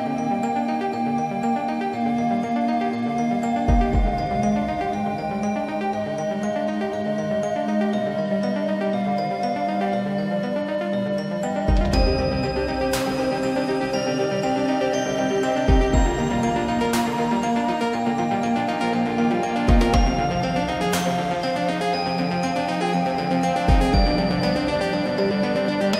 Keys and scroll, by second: 20.2 ctrl+z.